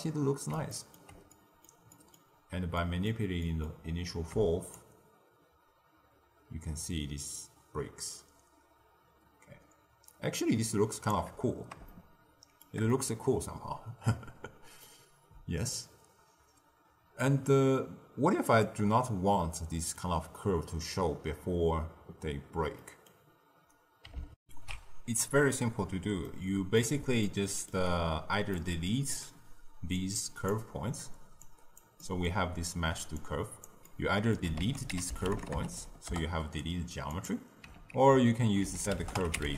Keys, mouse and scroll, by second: 2.3-2.7 scroll down 1, 2.7-3.8 middle drag, 3.8-4.7 scroll up 1, 4.7-7.7 shift+drag, 11.8-15.7 shift+middle drag, 15.7-18.7 shift+drag, 19.3-22.4 middle drag, 22.7 middle click, 23.2-24.3 scroll down 2, 24.3 ctrl+alt+shift+q, 26.2 middle click, 27.1 scroll up 1, 27.2 ctrl+middle click, 28.0-28.4 scroll down 1, 28.4-29.9 middle drag, 29.9-31.4 drag, 31.9 middle click, 32.2-33.1 scroll up 1, 33.1 click, 33.8-34.5 middle drag, 34.5 ctrl+a, 37.9 ctrl+a.